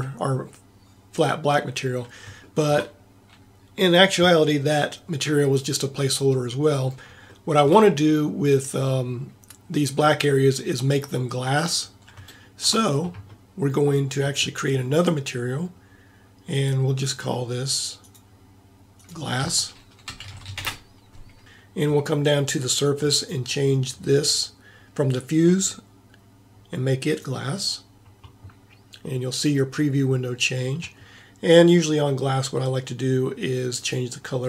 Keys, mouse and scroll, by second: 1.9 middle click, 2.4-7.4 middle drag, 7.6-10.1 middle drag, 12.4-14.0 middle drag, 16.6-20.4 drag, 20.4 s, 33.8-34.4 drag.